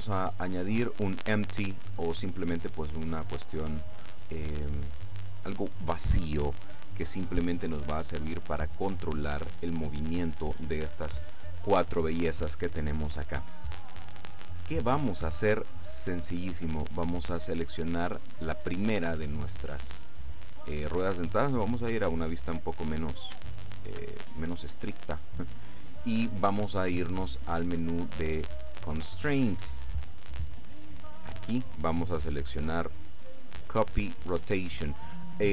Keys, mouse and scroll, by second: 1.5 click, 2.8-4.7 drag, 5.1-6.1 drag, 18.0 right click, 20.1 scroll down 1, 20.4 middle click, 22.0-22.6 scroll up 1, 22.7-23.1 scroll down 2, 23.1 middle click, 23.6 shift+middle click, 24.2 shift+middle click, 28.6 click, 31.6 click.